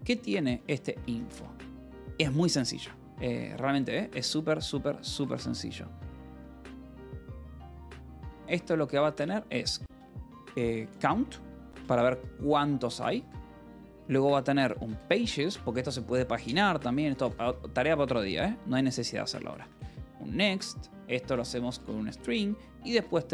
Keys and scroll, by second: 0.5 f, 0.9 space, 1.2 Return, 2.3 alt+Tab, 2.7 k, 3.9 alt+Tab, 6.0-15.3 typing, 16.4-17.7 typing, 17.7 Return, 18.8-23.3 typing.